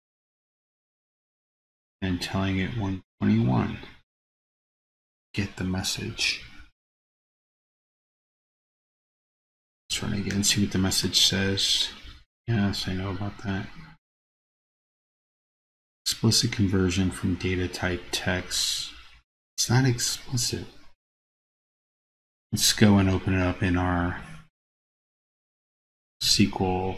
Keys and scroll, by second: 26.3 super+c.